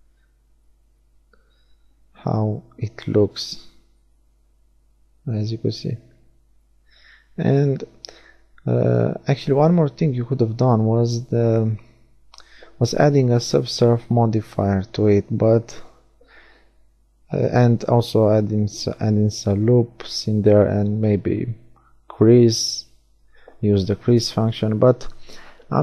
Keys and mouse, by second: 0.1-4.5 middle drag, 3.0 a, 3.8 a, 4.5 z, 5.4-7.0 middle drag, 7.3-10.2 drag, 17.8 Tab, 19.0 ctrl+r, 25.6-25.8 middle drag.